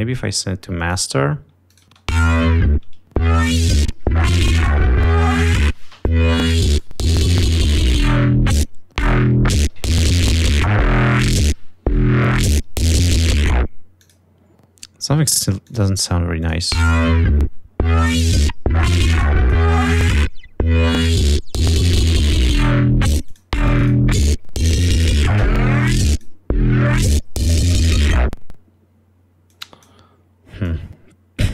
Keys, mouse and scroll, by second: 2.1 click, 2.9 click, 3.2 space, 7.8 click, 8.8 space, 9.4 click, 14.0 click, 14.7 click, 16.3 click, 17.1 click, 19.0-20.3 drag, 23.7 click, 25.5-26.6 drag, 28.0 click, 29.5 click, 30.7-31.5 drag.